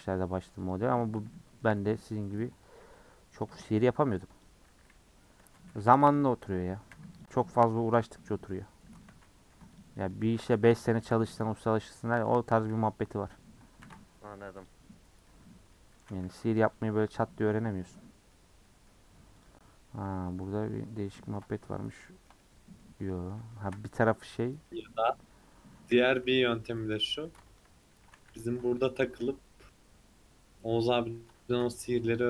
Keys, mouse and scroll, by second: 0.0 click, 1.0 alt+z, 1.3 middle click, 3.5 a, 4.4 u, 5.4 Tab, 6.9 h, 7.2 click, 7.5 Tab, 7.6-8.7 middle drag, 8.7-9.1 scroll up 2, 9.1 alt+z, 9.8 click, 9.9-11.0 middle drag, 11.0 shift+click, 11.5 middle drag, 11.8 scroll up 1, 12.1-12.4 middle drag, 12.4-13.8 scroll up 2, 13.8 ctrl+r, 15.3 middle click, 16.0 a, 17.0 u, 17.8 middle click, 18.4 scroll up 1, 18.6 middle click, 19.0-19.4 scroll up 1, 19.4 click, 19.7-20.3 scroll up 2, 20.3 middle click, 20.4 scroll down 1, 20.7 middle click, 21.5 a, 22.0-23.8 middle drag, 23.8 3, 24.1 click, 24.7-25.7 middle drag, 25.7-28.9 typing, 26.5 click, 27.6 alt+click, 29.7-31.5 middle drag, 31.5 ctrl+r.